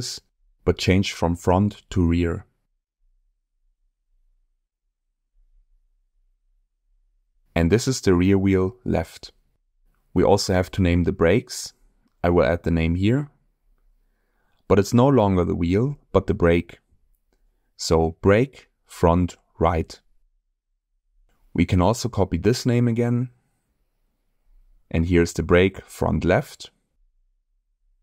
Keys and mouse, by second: 1.0 BackSpace, 6.2 middle click, 7.1-9.9 drag, 8.3 BackSpace, 10.9 middle click, 11.9 shift+middle click, 12.3 middle click, 13.1 shift+middle click, 13.7 click, 14.6-20.1 drag, 16.3 Left, 16.4 Left, 17.1 BackSpace, 17.2 BackSpace, 21.1-22.2 ctrl+drag, 22.8-23.4 middle drag, 25.1-27.2 ctrl+drag.